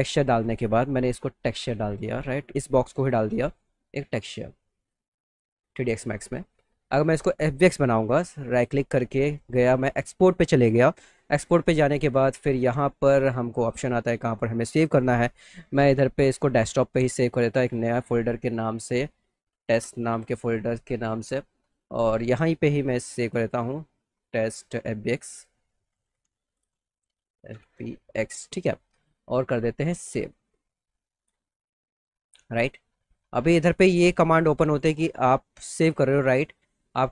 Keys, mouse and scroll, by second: 0.7 click, 1.6 click, 2.9 click, 4.1 click, 4.8 click, 5.5 click, 6.4 click, 6.9 click, 8.6 click, 10.9 click, 14.8 click, 17.6 click, 19.2-20.5 typing, 20.4 click, 21.6 click, 21.8 click, 23.2 click, 23.8-24.6 typing, 25.2 click, 25.6-27.1 typing, 28.1 x, 30.0 click, 34.6 click, 35.1 click.